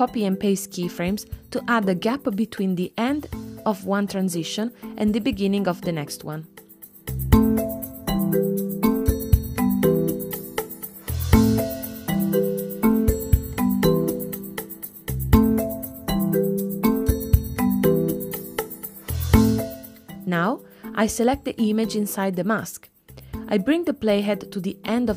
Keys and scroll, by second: 0.4 super+c, 2.2 super+v, 11.4 space.